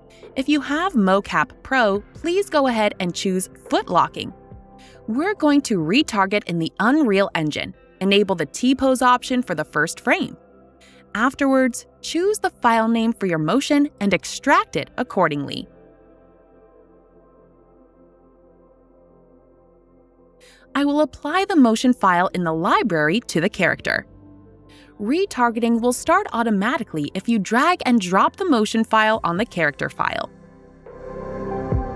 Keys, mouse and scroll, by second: 0.2 click, 9.6 click, 10.1 click, 12.1 click, 13.5-16.0 typing, 17.4 typing, 18.0 click, 22.6 click, 28.1 click, 28.7-30.1 scroll.